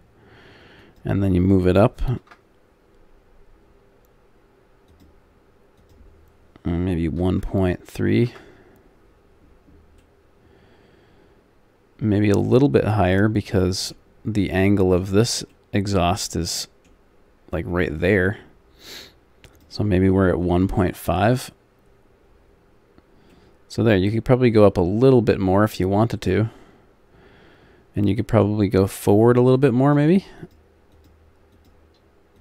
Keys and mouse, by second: 9.4 middle click, 10.1 click, 10.5 middle click, 12.0-13.2 middle drag, 19.5-21.4 drag, 29.8-32.4 drag.